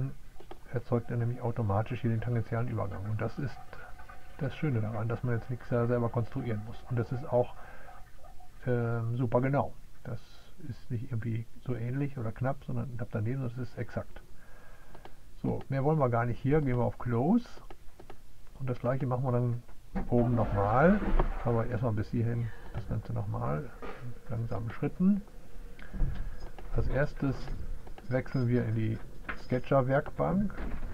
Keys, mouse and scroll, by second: 0.0 click, 17.5 click, 20.1-22.8 middle drag, 27.1 click, 29.4 click, 30.5 click.